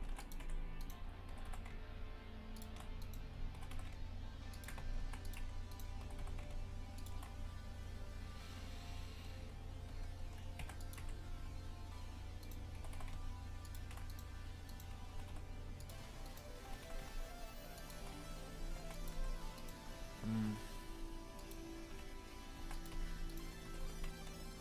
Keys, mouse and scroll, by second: 0.1 ctrl+r, 0.8 right click, 1.3 g, 3.0 right click, 3.6 g, 5.0 ctrl+r, 5.7 right click, 6.1 g, 10.6 ctrl+r, 12.5 right click, 12.8 g, 14.1 right click, 14.7 right click, 15.2 g, 16.3 right click, 16.7 g, 18.6 a, 18.8 ctrl+r, 19.6 right click, 20.4 g, 21.9 a, 22.6 ctrl+r, 23.3 right click, 23.7 g.